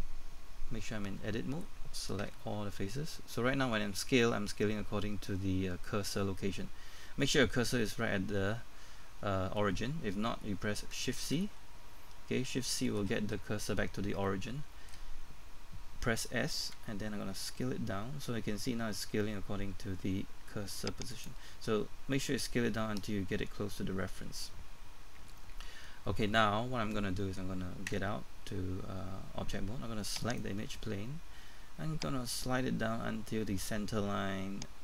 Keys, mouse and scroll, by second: 1.2 Tab, 2.2 a, 12.1-12.4 scroll up 1, 13.1-13.4 scroll up 1, 13.9-14.2 scroll down 1, 14.2 shift+middle click, 16.6 s, 21.1 click, 27.9 Tab, 30.2 right click, 32.4 click.